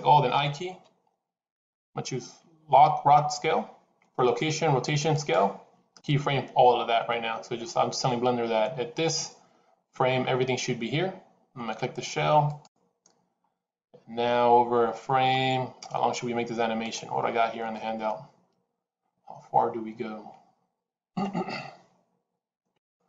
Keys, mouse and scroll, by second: 12.3 click, 14.0 scroll down 1, 15.4-16.8 scroll down 2.